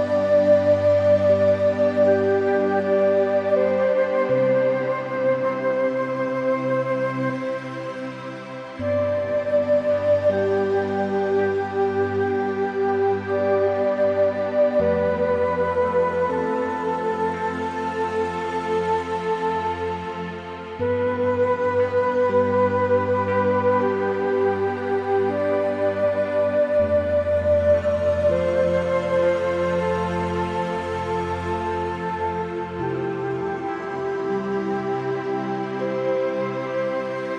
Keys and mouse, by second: 0.5 g, 0.7 z, 1.7 Tab, 2.3 click, 2.9 Tab, 3.9 middle click, 4.6 a, 5.1 middle click, 5.6 ctrl+r, 9.2 click, 9.9 g, 10.1 z, 11.0 Escape, 11.5 click, 12.3 g, 12.6 z, 13.6 click, 14.4 click, 15.1 g, 15.4 z, 16.5 click, 16.7 Tab, 17.0 middle click, 17.8-19.0 middle drag, 19.2 middle click, 20.1 middle click, 21.0 Tab, 21.4 shift+middle click, 21.9 1, 24.1 `, 25.0 g, 25.7 z, 26.7 `, 27.2 Escape, 27.4 click, 28.1 g, 29.0 `, 29.1 Escape, 30.1 click, 30.4 shift+middle click, 31.0-33.1 drag, 33.5 g, 34.1 z.